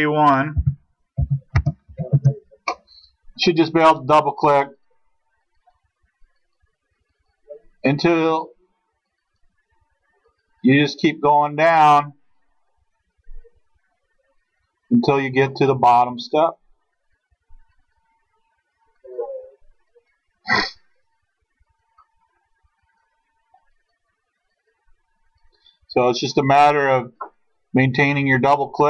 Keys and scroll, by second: 0.6-1.9 typing, 2.2 Return.